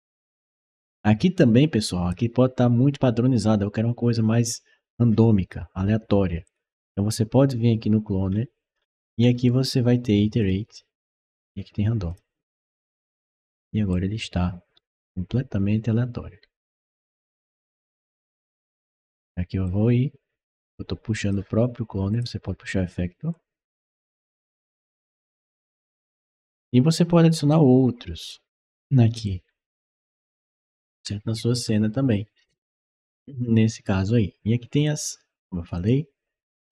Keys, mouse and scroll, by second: 6.3 click, 8.1-9.3 scroll down 3, 9.0 middle click, 10.2 click, 11.9 click, 13.7-18.6 right drag, 14.0 d, 15.2 a, 16.3 s, 17.0 w, 17.8 a, 18.4 s, 19.5-21.1 drag, 21.9 click, 23.1-25.9 drag, 26.1-27.3 right drag, 28.1 click, 29.1-31.7 right drag, 32.7-33.2 scroll up 2, 33.6 scroll up 1, 34.7 click, 35.6 click, 36.6 right click.